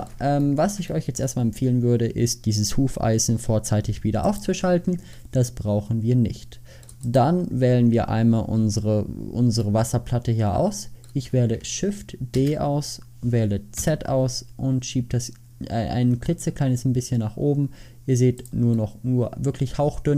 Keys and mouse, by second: 0.7 middle click, 5.7-6.2 middle drag, 6.5 middle click, 7.2 middle click, 12.4 shift+d.